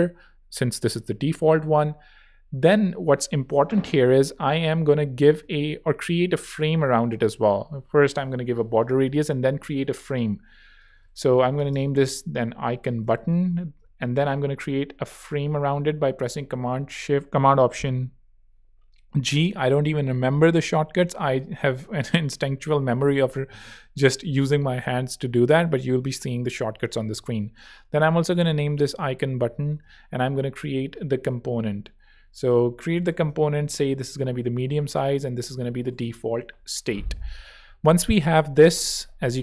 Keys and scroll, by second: 7.6 4, 8.0 Tab, 9.0 alt+super+Tab, 9.5 alt+super+r, 10.4 shift+super+r, 10.9 shift+super+r, 11.0-13.3 typing, 13.7 alt+super+Return, 15.3 alt+super+g, 26.9 super+r, 27.3-29.1 typing, 29.5 Return, 29.8 alt+super+k, 30.9 alt+super+z, 31.1 super+r, 31.9 super+Escape, 32.5 alt+super+r, 32.8-36.4 typing, 38.9 Return.